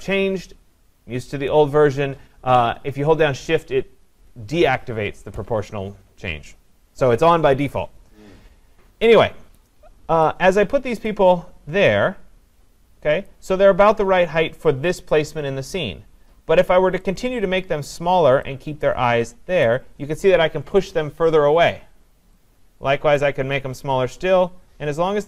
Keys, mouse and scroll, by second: 9.6 click, 13.3 click, 17.9 click, 19.6 click, 23.2 click.